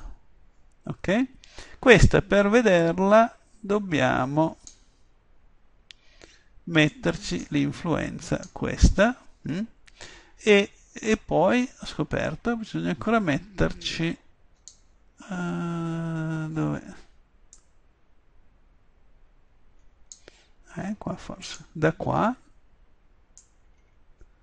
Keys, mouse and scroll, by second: 0.0-1.8 drag, 2.9-4.7 drag, 7.0-10.1 drag, 11.1-13.0 drag, 17.6-19.5 drag, 21.5-23.3 drag, 23.5-24.4 drag.